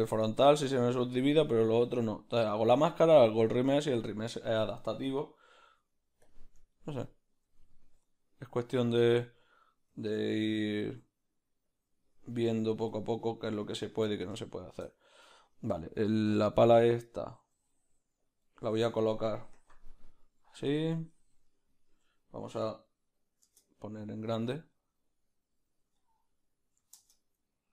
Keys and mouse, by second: 6.4 q, 6.7-12.9 ctrl+middle drag, 7.4 g, 13.0 q, 13.4-22.4 ctrl+middle drag, 17.6 g, 19.5 KP_Decimal, 19.8 KP_Decimal.